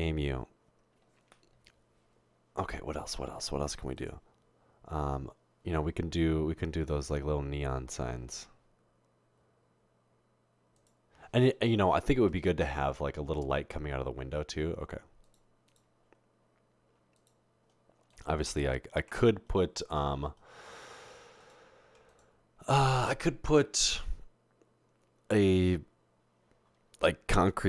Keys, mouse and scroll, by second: 13.0 Tab, 13.4 Tab, 19.2 Tab.